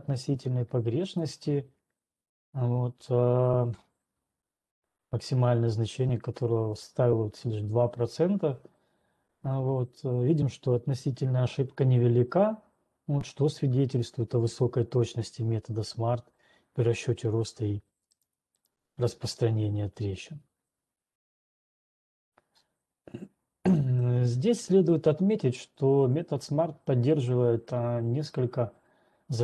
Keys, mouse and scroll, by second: 1.3 click, 18.3 right click, 19.4 right click, 21.9 right click, 23.3 scroll, 23.8-25.1 scroll.